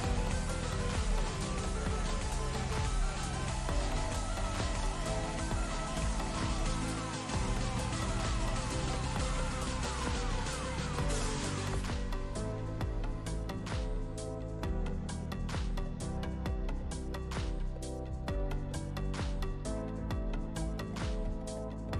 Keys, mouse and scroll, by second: 0.9-4.0 alt+drag, 5.6-6.8 drag, 12.6 ctrl+z, 13.1-13.5 drag, 16.3 click, 19.0-20.0 drag.